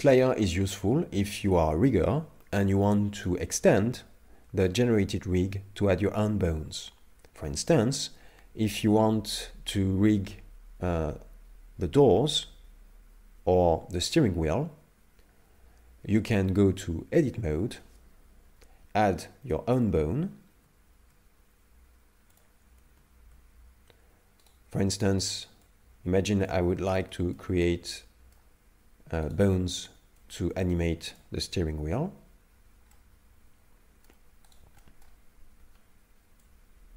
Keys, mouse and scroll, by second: 3.2 right click, 3.3 right click, 17.1 Tab, 18.4 KP_3, 19.5 shift+middle click, 20.5 shift+s, 22.9 shift+a, 24.4 right click, 25.7 click, 27.1 shift+middle click, 27.6 middle click, 29.3 right click, 30.2 right click, 30.2 click, 32.9 middle click, 34.5 right click, 34.8 middle click, 36.4 click.